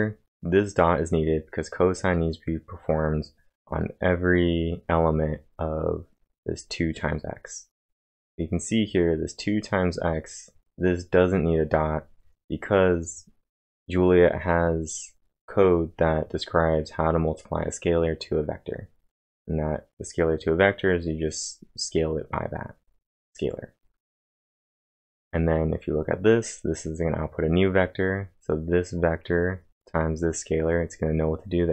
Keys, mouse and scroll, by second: 8.5-9.2 typing, 8.7 click, 9.4 click, 14.6-15.4 typing, 14.9 click.